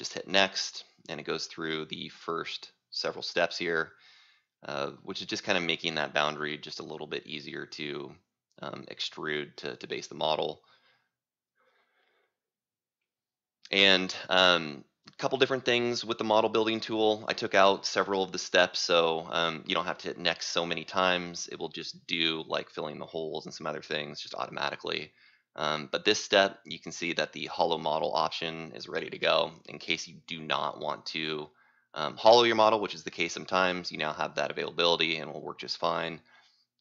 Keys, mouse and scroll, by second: 16.5 scroll up 2, 16.6 scroll, 16.9-17.9 scroll up 6, 17.9 c, 19.8 right click, 22.0 click, 31.8 click.